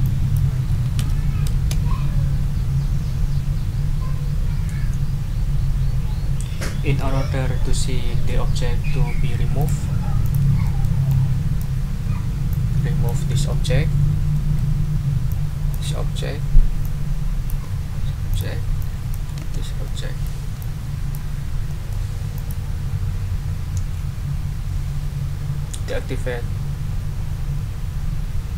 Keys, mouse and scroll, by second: 0.0 click, 1.0 1, 1.5 Return, 9.6 click, 10.2 ctrl+click, 10.6 ctrl+click, 11.1 ctrl+click, 12.5 ctrl+click, 13.7 Delete, 14.3 click, 15.3 click, 15.9 Delete, 16.8 click, 17.6 Delete, 18.3 click, 18.8 click, 19.4 Delete, 19.8 click, 20.6 click, 21.7 click, 22.3 click.